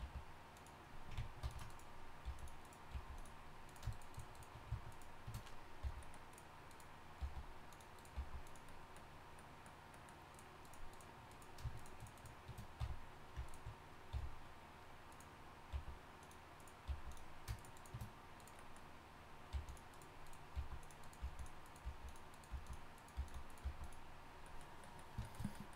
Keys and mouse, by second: 0.0 g, 1.4 ctrl+r, 2.2 g, 2.9 g, 5.0 right click, 5.8 f, 6.1-8.1 right drag, 7.2 g, 8.1 g, 9.3 click, 9.3 right click, 10.1-11.3 drag, 12.8 f, 13.4 click, 13.7 right click, 14.1 f, 15.7 g, 16.9 g, 19.5 g, 20.5-23.6 typing.